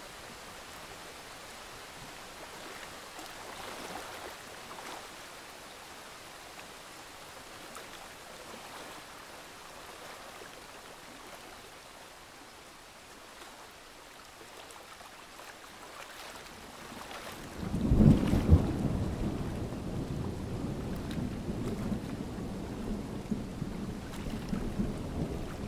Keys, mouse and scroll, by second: 2.1 ctrl+alt+z, 2.6 Escape, 3.6 click, 5.7 Escape, 5.8-7.2 scroll down 1, 7.2 click, 16.6 Escape, 17.9-19.9 drag, 20.7 alt+scroll up 1, 21.2 click.